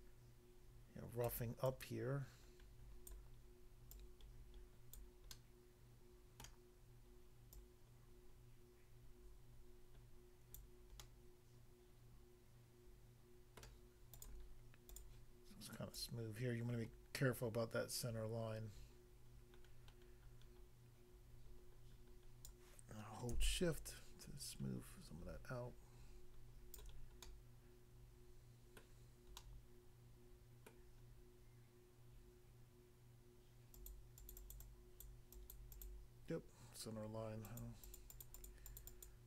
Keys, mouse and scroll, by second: 1.3 click, 1.7 click, 3.0 click, 3.9 click, 5.0 click, 5.3 middle click, 6.5 middle click, 7.6 click, 10.6 click, 11.0 middle click, 13.6 middle click, 14.1 click, 14.2 click, 14.9 click, 15.0 click, 16.0 click, 22.5 click, 23.5 shift+click, 27.3 middle click, 28.8 middle click, 29.4 middle click, 30.8 middle click, 31.0 scroll down 1, 33.8 click, 33.9 click, 34.2 click, 34.3 double click, 34.4 double click, 34.5 double click, 34.6 double click, 35.0 double click, 35.3 double click, 35.5 click, 37.5 click, 37.7 click, 37.8 click, 38.0 click, 38.1 click, 38.2 click, 38.3 click, 38.4 click, 38.6 click, 38.8 click, 38.9 click, 39.1 double click.